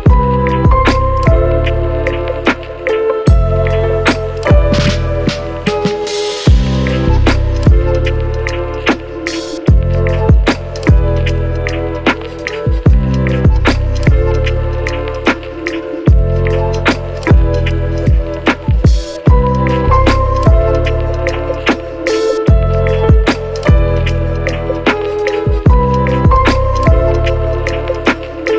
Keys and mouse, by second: 0.0-1.1 typing, 0.0 shift+click, 0.7 shift+click, 0.8 shift+click, 1.3 shift+middle click, 1.6 shift+middle click, 1.8 click, 2.5 KP_7, 2.5 g, 2.9 s, 3.1 shift+click, 3.6 ctrl+click, 3.6 ctrl+right click, 3.9 ctrl+m, 4.1 Tab, 4.1 alt+middle click, 4.6-5.8 alt+drag, 4.9 alt+Tab, 5.1 f, 5.4 i, 5.6 Tab, 5.8 middle click, 7.0 ctrl+KP_Subtract, 7.9 h, 8.3 Tab, 9.1 click, 9.8 q, 9.9 click, 11.2 h, 11.7 middle click, 12.4 Tab, 12.6 Tab, 12.6 ctrl+click, 12.6 q, 12.8 Tab, 13.3 Tab, 13.9 a, 14.1 q, 14.2 Tab, 14.5 Tab, 15.2 KP_7, 15.4 shift+click, 15.7 k, 16.5 k, 17.1 ctrl+z, 17.1 ctrl+click, 17.3 ctrl+z, 17.3 Tab, 17.5 a, 18.4 ctrl+a, 18.4 ctrl+click, 19.0 click, 19.8 click, 19.8 middle click, 19.8 right click, 20.1-22.0 drag, 20.1-22.0 middle drag, 20.1-22.0 right drag, 21.1 KP_0, 24.1-26.0 middle drag.